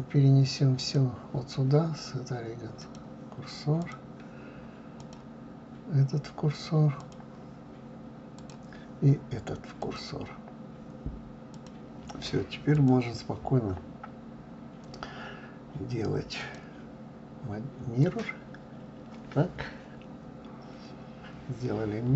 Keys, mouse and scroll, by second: 0.8-3.9 drag, 5.0-8.0 drag, 8.4 click, 9.8-12.9 drag, 16.4-19.4 drag.